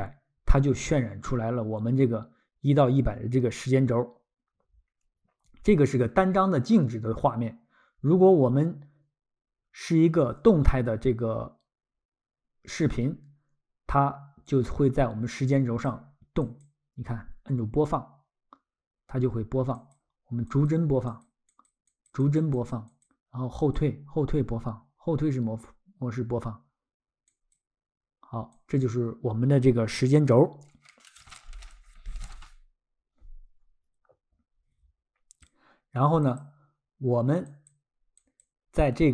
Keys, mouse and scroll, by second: 16.4 click, 19.8 click, 22.1 click, 22.2 click, 22.7 click, 27.3 click, 28.5 click, 36.3 click, 39.0-39.1 scroll.